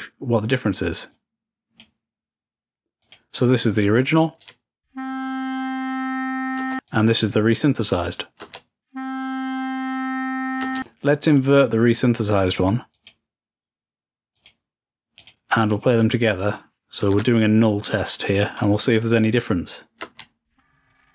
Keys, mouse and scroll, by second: 0.0-1.0 drag, 1.3-2.3 drag, 3.2 click, 7.0-8.1 drag, 11.4 click, 13.1-15.7 drag, 16.1 click, 18.6 click.